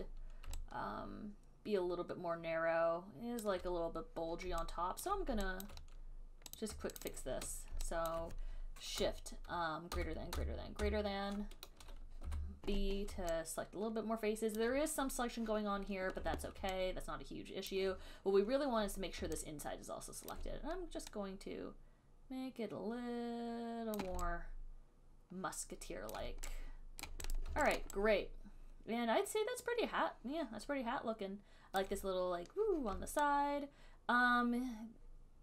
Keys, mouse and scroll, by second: 3.7 alt+click, 5.3 alt+click, 5.9 alt+click, 6.8 click, 7.3 shift+click, 7.3 shift+click, 8.4 alt+click, 10.2 >, 10.6 >, 11.1 >, 12.5 b, 14.8 alt+click, 16.4 r, 17.9 alt+click, 20.6 alt+click, 24.2 click, 26.3 alt+click, 27.3 right click, 27.6 right click, 28.0 alt+right click, 32.0 alt+click.